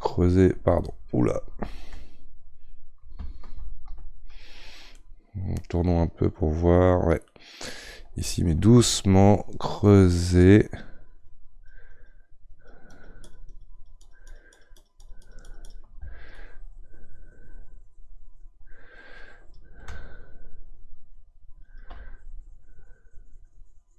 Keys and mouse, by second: 1.7 ctrl+z, 3.6 ctrl+z, 4.9-9.4 middle drag, 9.4-23.9 ctrl+drag.